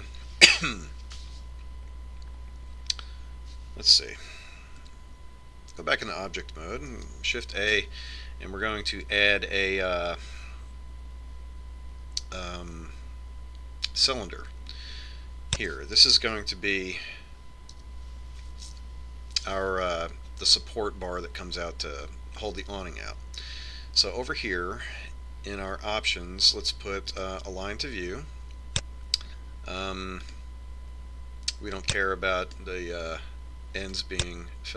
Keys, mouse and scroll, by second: 0.4 middle click, 6.3 Tab, 8.5 shift+a, 19.4 KP_1, 28.8-30.6 drag, 31.8-33.5 drag.